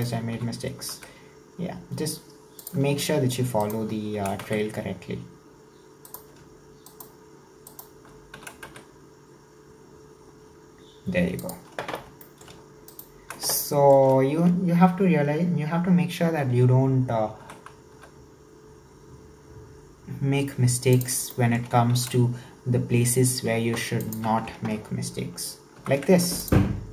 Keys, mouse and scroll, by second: 0.0 alt+right click, 0.3 s, 3.6 alt+right click, 4.2 s, 6.9 alt+right click, 7.7 alt+right click, 8.4 s, 12.2 shift+middle click, 12.9 alt+right click, 13.6-16.7 shift+middle drag, 17.4 e, 21.3 shift+middle click, 22.0 s, 25.8 ctrl+r.